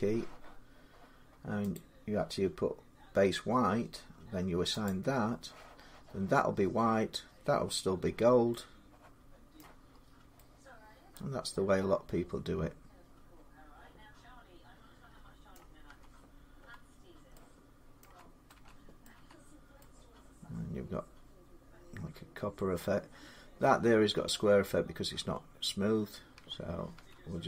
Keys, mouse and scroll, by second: 1.5 click, 1.5 l, 4.7 click, 7.8 Tab, 9.3 middle click, 9.7-10.2 scroll up 6, 10.9 scroll, 12.9 scroll up 6, 14.7 middle click, 15.3 middle click, 15.6 Tab, 16.4 Tab, 17.8 middle click, 17.8 Tab, 18.4 Tab, 18.8 middle click, 19.0 Tab, 22.5 middle click, 26.1 Tab, 26.8 Tab.